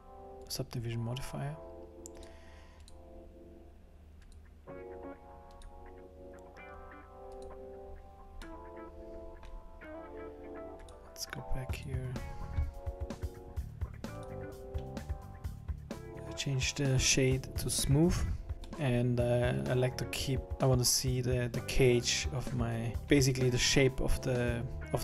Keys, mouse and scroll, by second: 2.2 click, 2.8 click, 4.3 click, 5.5 click, 7.3 click, 8.5 middle click, 9.1 middle click, 10.8 click, 11.7 click, 14.2 click, 18.5 Tab, 18.5 middle click, 18.5 scroll down 3, 18.7 middle click, 23.0 click, 23.0 middle click, 24.8 middle click.